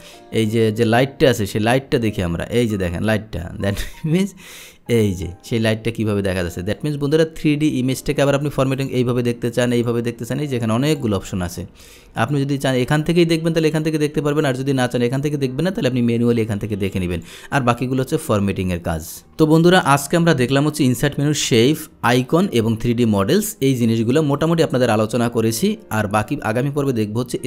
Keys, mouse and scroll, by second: 1.5-3.8 drag, 4.8-6.8 drag, 8.9 click, 9.2 click, 9.9 click, 10.9 click, 12.3 click, 14.5 click, 17.2 click, 17.8 click, 19.1 click, 19.9 click, 23.1 click, 24.4 click.